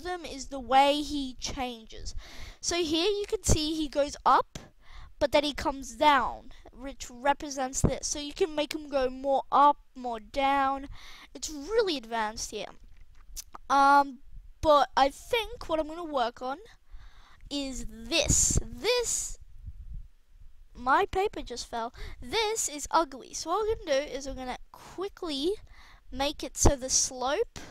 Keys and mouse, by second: 23.2-24.9 right drag, 23.6 r, 25.0 g, 27.3-27.7 drag.